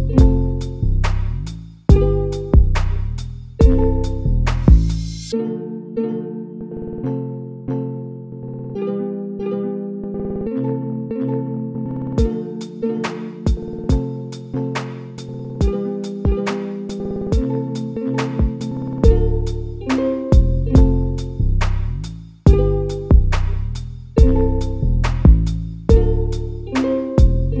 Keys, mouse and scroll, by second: 3.9 Tab, 4.3 a, 4.9 shift+d, 5.3 g, 9.2 middle click, 9.9-10.3 scroll up 1, 10.3-15.6 middle drag, 15.6 l, 16.4 middle click, 17.1-17.8 scroll down 1, 17.8 KP_1, 18.9 g, 20.1 a, 20.3 a, 21.1 middle click, 21.7 scroll up 1, 22.1 middle click, 22.6-23.0 scroll up 1, 23.0 shift+middle click, 23.7 a, 25.6 click, 26.2 a, 26.4 a, 26.9-27.6 middle drag.